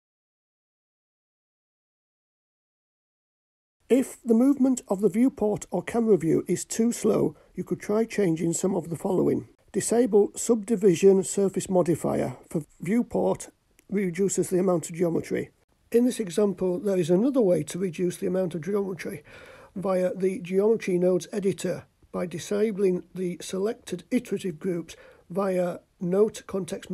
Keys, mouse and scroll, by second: 0.8 i, 2.0 i, 3.8 click, 5.2 click, 8.7 click, 10.6 click, 15.7 click, 17.3 click, 20.0-21.6 drag, 22.5-24.4 drag, 25.8 a, 26.2 KP_Decimal.